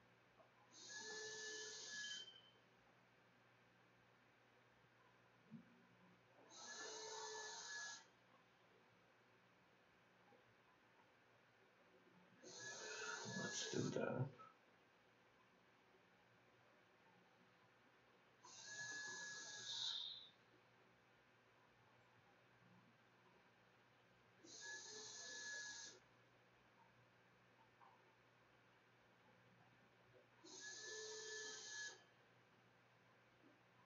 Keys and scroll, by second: 2.5-4.3 typing, 5.3-8.3 typing, 9.9 ctrl+s.